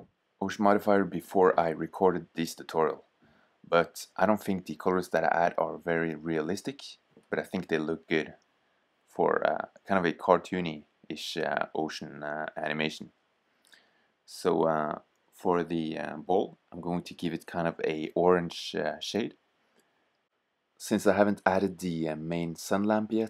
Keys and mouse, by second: 12.3-17.3 drag.